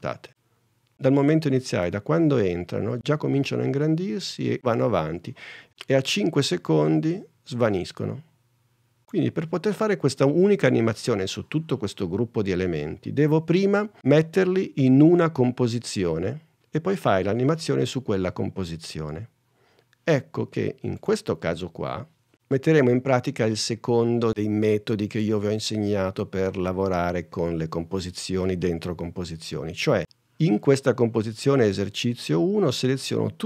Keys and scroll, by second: 0.2 space, 1.9 space, 7.5 space.